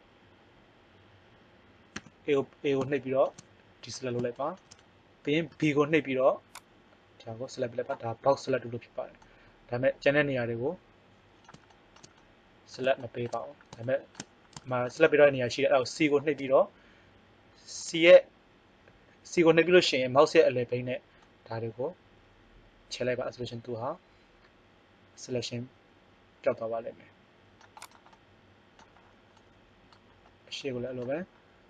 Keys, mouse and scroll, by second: 1.9 a, 5.5 b, 9.2-10.3 middle drag, 10.4 middle click, 16.4 c.